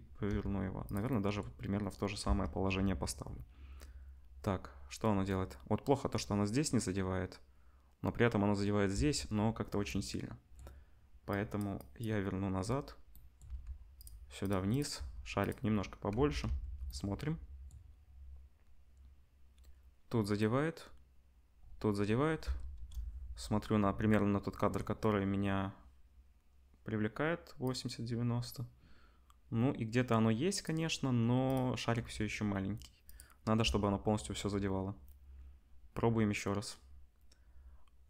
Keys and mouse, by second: 0.2 g, 2.2 space, 8.9 space, 11.3-11.6 drag, 11.6 middle click, 11.7-14.0 drag, 13.4 g, 14.0 middle click, 14.4 click, 14.4 middle click, 14.7 click, 14.7-17.9 middle drag, 14.9 s, 16.1 ctrl+s, 16.4 space, 22.4 space, 22.7 KP_0, 27.6-31.5 drag, 31.9 s, 33.6 space.